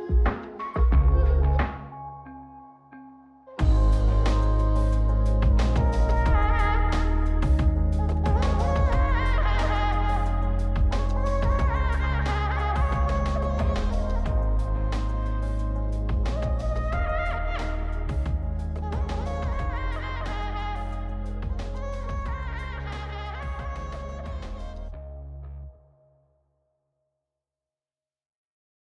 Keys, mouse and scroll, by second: 4.9 click, 5.5 shift+q, 11.0 shift+q, 13.2 click, 13.5 shift+q, 25.1 click, 26.6 shift+q.